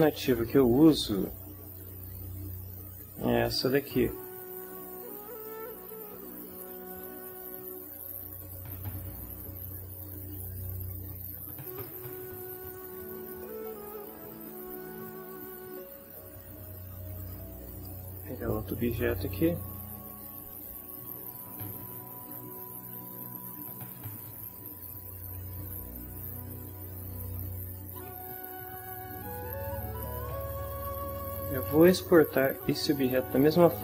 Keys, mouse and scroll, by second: 5.3 click, 6.8 click, 11.7 click, 13.8-15.2 ctrl+middle drag, 17.2 click, 17.7 click, 18.9 right click, 19.5 middle click, 23.1 z, 23.9 z, 24.7 ctrl+middle click, 25.5 ctrl+shift+middle click.